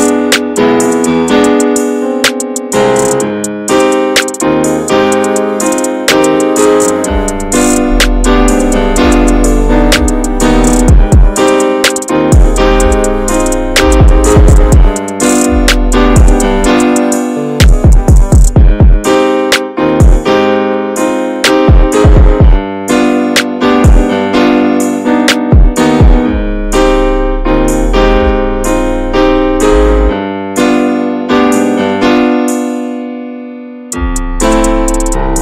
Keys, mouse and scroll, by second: 0.8 middle click, 1.7 scroll down 2, 1.9 shift+middle click, 2.2-2.8 scroll up 1, 2.8 ctrl+r, 5.9 ctrl+r, 8.9 scroll down 2, 9.2-11.4 middle drag, 11.4 ctrl+r, 19.2 scroll up 1, 19.5 shift+middle click, 20.4 ctrl+r, 22.4 ctrl+r, 26.6 ctrl+r, 27.5 shift+middle click, 28.3 ctrl+r, 29.1-29.4 scroll down 3, 29.4 middle click, 29.7-30.0 scroll down 3, 30.0 shift+middle click, 30.2 scroll up 2, 30.5 middle click, 30.7-31.0 scroll down 1, 31.0 shift+middle click, 31.3 scroll down 3, 31.6-32.8 middle drag, 32.8 ctrl+r, 34.7 shift+middle click, 35.3 ctrl+r.